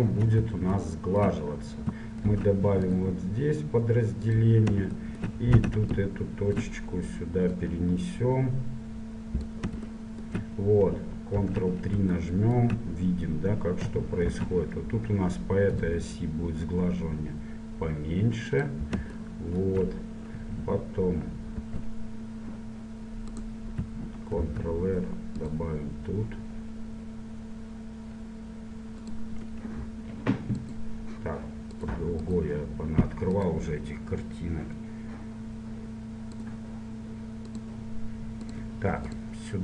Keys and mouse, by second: 2.4 ctrl+r, 5.6 middle click, 5.8 a, 6.2-9.6 drag, 10.2-14.5 middle drag, 11.5 ctrl+3, 14.5 ctrl+r, 20.9 click, 21.8 ctrl+t, 23.5-25.4 drag, 24.6 ctrl+r.